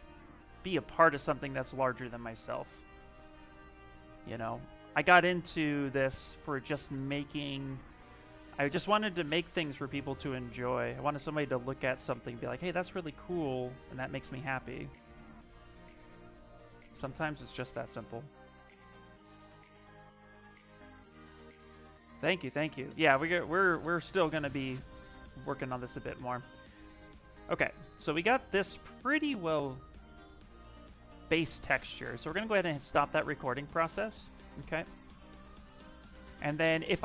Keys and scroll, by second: 1.9 s, 28.8 s.